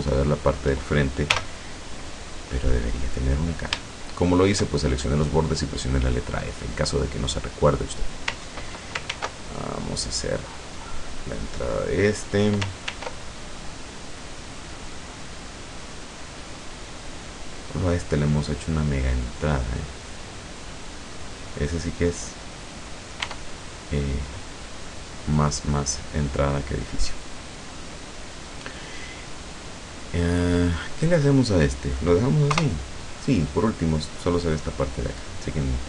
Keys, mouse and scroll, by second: 0.0 shift+right click, 1.3 f, 2.0 scroll down 1, 2.4 middle click, 3.5-3.8 scroll up 1, 3.9 shift+middle click, 6.0 right click, 7.5 click, 9.1 ctrl+r, 10.4 scroll up 2, 11.6 click, 12.9 ctrl+r, 13.3 ctrl+click, 17.1 click, 18.2-20.5 middle drag, 21.5 click, 21.9 click, 22.6 right click, 23.3 e, 24.3 click, 32.6 KP_0.